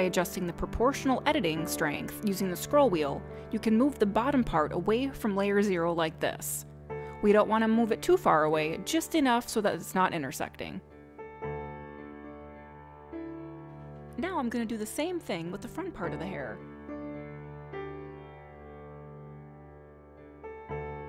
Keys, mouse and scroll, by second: 4.4 click, 6.2 g, 14.5 click, 15.7 click, 18.8 ctrl+click.